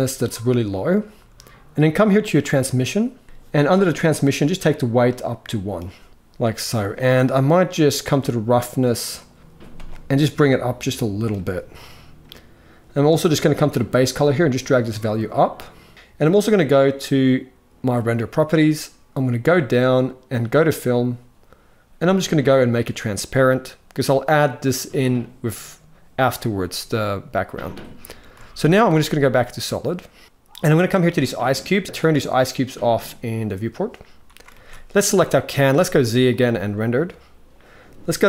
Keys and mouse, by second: 4.6 click, 6.1 alt+a, 8.8 click, 10.1 click, 13.4 click, 15.9 alt+a, 17.7-19.6 drag, 20.2 click, 22.3 click, 28.0 z, 30.2 ctrl+s, 30.6 click, 33.2 click, 34.2 ctrl+s, 35.4 z, 38.0 click.